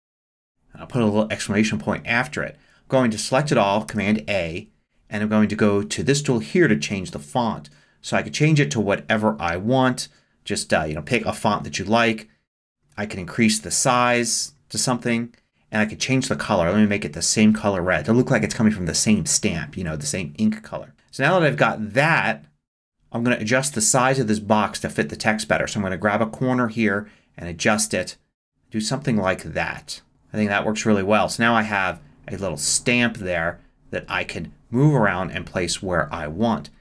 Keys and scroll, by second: 0.0-0.2 typing, 3.9 super+a.